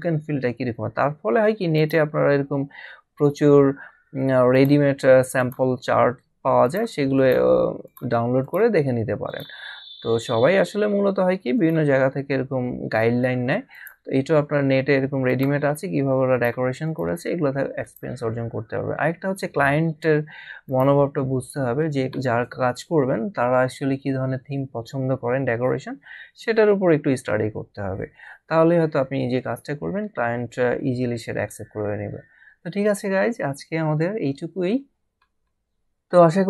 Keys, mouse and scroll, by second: 1.8 click, 3.3 scroll down 1, 4.5 click, 10.1 scroll down 1, 11.5 click, 13.7 click, 15.3 click, 20.7 click.